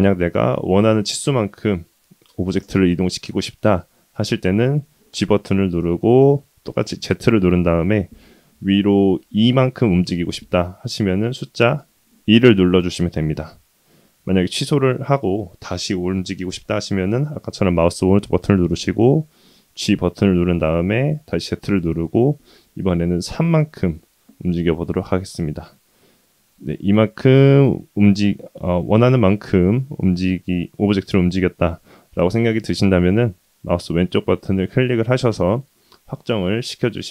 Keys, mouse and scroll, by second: 5.1 g, 19.7 g.